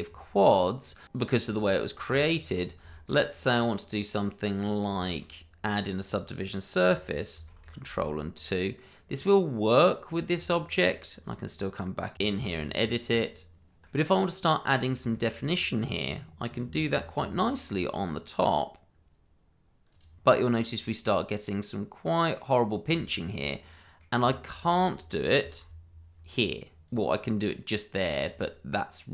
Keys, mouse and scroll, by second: 0.4 middle click, 1.0-1.5 scroll down 1, 1.6 shift+middle click, 2.1 click, 2.5 Tab, 2.9 shift+middle click, 2.9 middle click, 4.6 click, 5.0 middle click, 7.3 ctrl+2, 8.4 middle click, 10.3 Tab, 11.1 click, 11.6-13.0 typing, 12.4 click, 12.6 double click, 13.6 click, 13.8 middle click, 15.1 shift+middle click, 15.1 middle click, 16.6 ctrl+r, 17.0 click, 19.9 click, 20.2-20.5 scroll up 1, 20.5 middle click, 23.0 shift+middle click, 23.0 middle click, 23.3 shift+middle click, 23.5 middle click, 25.4 ctrl+r, 26.8 click, 28.4 middle click.